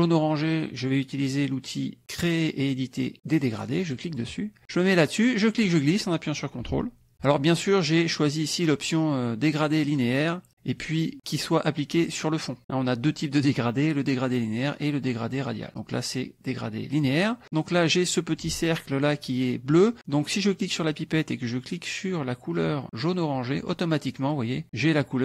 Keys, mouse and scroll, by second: 3.8 click, 5.4-7.2 drag, 15.2 click, 17.6-19.2 drag, 20.5 click, 23.1 click.